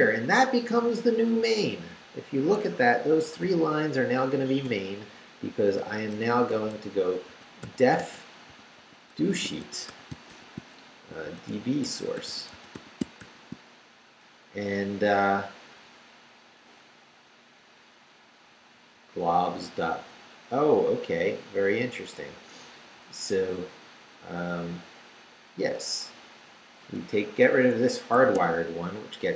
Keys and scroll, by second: 1.4 Up, 2.6 Escape, 3.2 d, 3.8 Down, 4.6 Up, 5.8-13.7 typing, 6.1 Return, 14.8 Down, 18.5 Right, 22.3 Left, 25.3 Right, 26.4 Up, 26.8 Left, 27.5 Escape, 28.1 d.